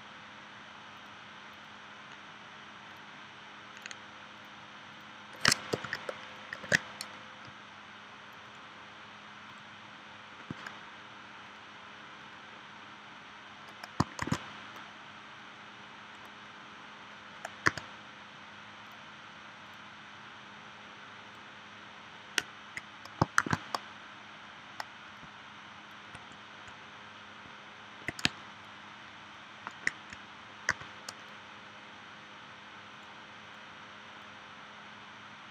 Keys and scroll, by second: 5.7 super+y, 6.6 super+y, 14.2 shift+c, 17.7 v, 23.4 shift+w, 28.2 space, 30.7 v.